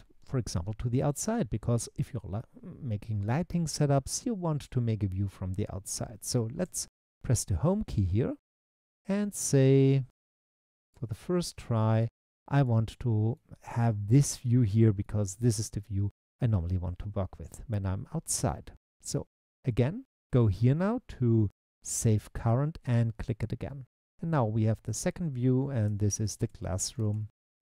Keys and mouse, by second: 6.6 Home, 11.2 middle click, 23.2 click, 25.0-27.6 drag, 26.6 s, 27.1 o.